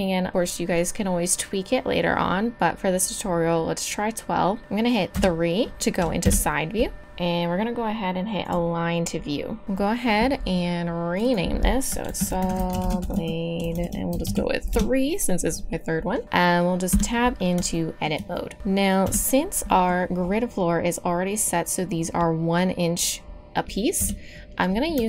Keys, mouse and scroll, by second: 4.4-5.0 drag, 5.1 KP_3, 6.2 KP_Decimal, 9.6-11.1 middle drag, 15.0-18.3 middle drag, 16.9 Tab, 19.0 KP_3, 21.7 middle click, 24.0 KP_3.